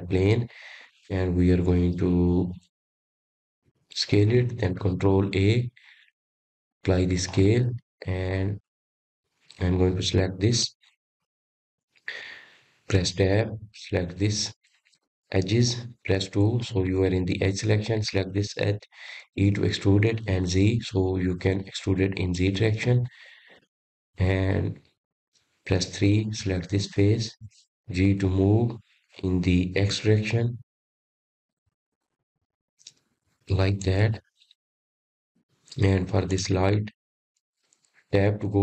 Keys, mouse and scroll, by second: 0.3 click, 1.9 shift+a, 4.2 s, 8.2 ctrl+a, 10.6-10.9 scroll down 3, 11.1 click, 11.6-12.7 middle drag, 12.7 click, 13.9-15.0 middle drag, 15.0 click, 16.2 Tab, 17.2 click, 19.4 2, 20.7 click, 22.3 e, 26.2-26.7 scroll down 4, 26.9-29.0 middle drag, 29.0 3, 29.4 click, 31.1 g, 37.0 click, 37.5-38.6 middle drag.